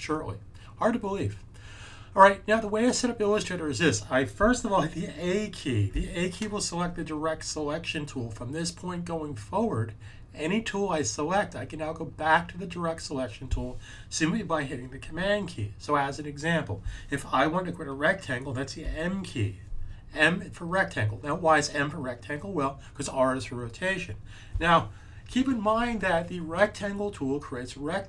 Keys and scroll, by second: 5.7 a, 18.7 m.